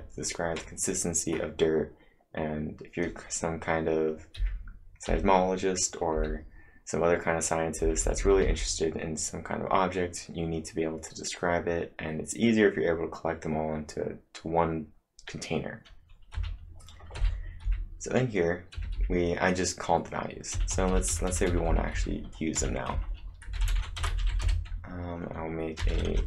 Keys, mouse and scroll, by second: 4.1-6.1 typing, 4.4 click, 7.8-8.5 typing, 16.3 typing, 21.3-22.6 typing, 22.9 Return, 24.4 space, 25.6-26.2 typing.